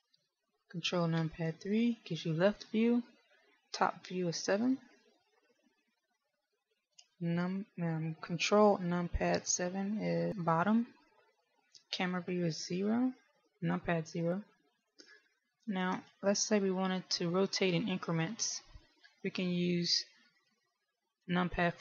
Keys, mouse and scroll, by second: 1.4 ctrl+KP_3, 5.0 KP_7, 10.0 ctrl+KP_7, 12.9 KP_0, 16.1 KP_1.